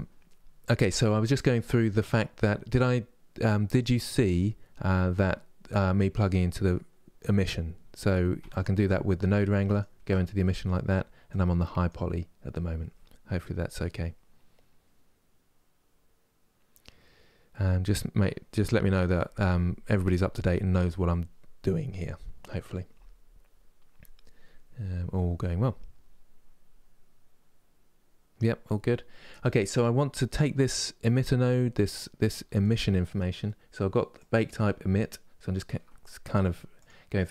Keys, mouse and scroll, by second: 8.2 ctrl+shift+click, 9.4 ctrl+shift+click, 11.0-37.3 drag.